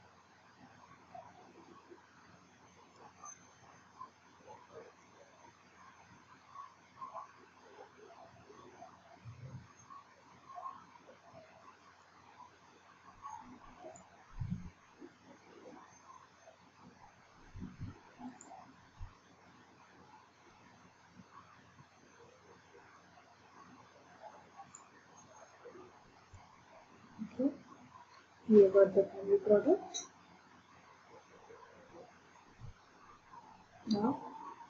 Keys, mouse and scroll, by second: 1.6-1.9 scroll, 3.0 click, 3.5 scroll, 5.0 click, 12.0 click, 14.0 click, 18.5 click, 22.9 click, 24.8 click, 26.3 click, 30.7 click, 32.4 middle click.